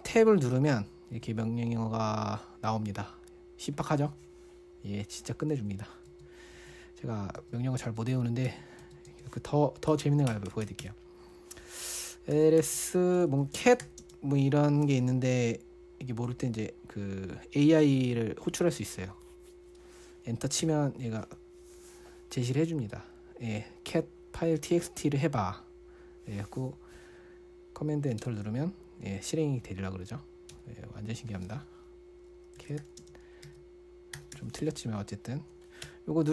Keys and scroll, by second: 0.6 typing, 1.6-3.1 typing, 6.1-6.5 typing, 10.3-11.3 typing, 12.8-14.4 typing, 18.2 ctrl+`, 18.5 ctrl+`, 18.5 ctrl+`, 21.0 Return, 28.6 super+Return, 30.9 Return, 32.8-36.3 typing.